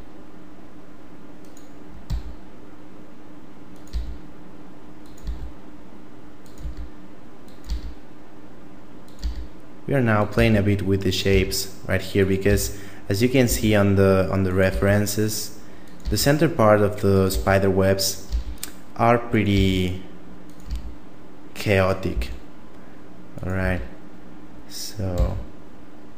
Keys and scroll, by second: 2.1 e, 3.9 e, 5.3 e, 6.6 e, 7.7 e, 9.2 e, 10.3 e, 11.3 e, 12.5 e, 13.5 e, 14.7 e, 16.0 e, 17.3 e, 18.3 e, 19.5 e, 20.7 e, 22.1 e, 23.6 e, 25.1 e.